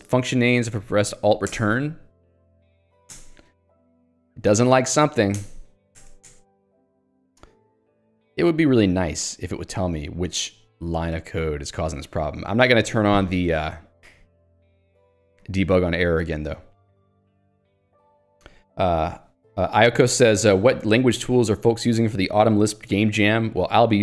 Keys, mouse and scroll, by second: 1.5 alt+Return, 2.7 j, 3.1 alt+Return, 3.6 h, 5.4 alt+Return, 8.0 alt+x, 12.1 ctrl+g, 12.5 Escape.